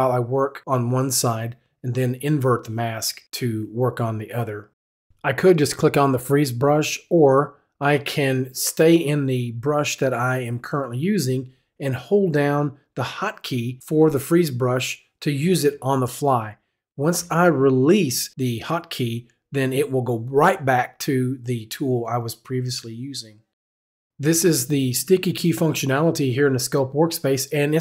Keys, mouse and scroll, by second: 0.8 click, 1.4-2.6 drag, 2.7 click, 3.0 right click, 4.0-7.4 typing, 4.3 click, 6.4 right click, 8.4-11.9 drag, 8.4-15.0 typing, 12.7 click, 13.9 right click, 15.0-17.7 drag, 16.8 f, 17.7 f, 18.6 f, 19.4-21.1 drag, 21.5 f, 24.6 right click.